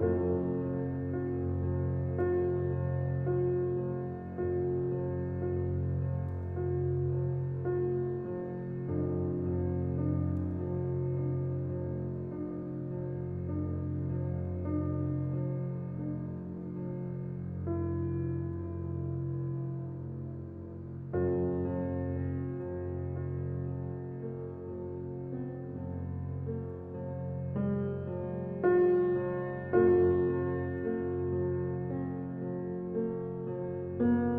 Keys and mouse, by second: 1.4 click, 1.7 click, 3.7 click, 8.8 click, 10.4 click, 11.4 Tab, 12.2 ctrl+r, 15.2-16.3 drag, 17.1 ctrl+r, 20.9 Tab, 22.0-23.2 drag, 24.2 click, 26.6-28.6 drag, 29.4 click, 30.4 Tab, 31.4 `.